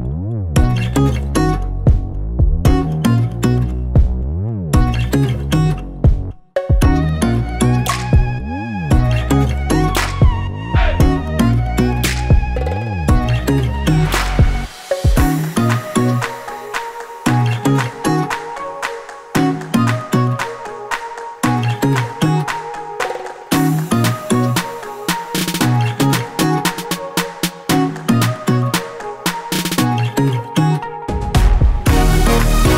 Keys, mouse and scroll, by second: 0.2-2.2 typing, 4.4 click, 4.9 scroll down 1, 5.8 click, 6.7 ctrl+z, 7.2 ctrl+z, 7.9 scroll down 1, 9.7-10.5 scroll down 1, 10.5-10.9 scroll up 1, 12.4 ctrl+click, 13.6 F8, 15.1 shift+Left, 15.2 shift+Left, 16.8-18.5 typing, 19.2 scroll down 1, 19.5-21.4 typing, 20.2 scroll down 1, 21.6 click, 22.2 click, 24.2-25.0 scroll down 1, 25.2-26.4 scroll down 1, 27.0-27.4 scroll down 1, 28.1-30.1 scroll down 1, 30.5 click, 31.6-32.1 scroll up 1.